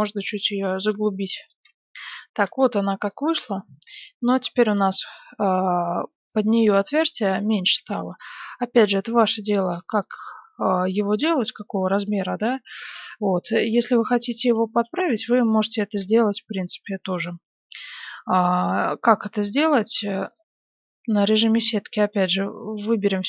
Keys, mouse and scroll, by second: 0.3 click, 1.7 z, 2.4 Tab, 3.1-4.7 middle drag, 4.7 click, 5.3-8.3 middle drag, 10.0-11.9 middle drag, 12.8 Tab, 13.3-15.5 middle drag, 13.8 z, 15.8 a, 18.4-19.8 middle drag, 20.4-22.0 middle drag, 21.0 c, 22.2 middle click.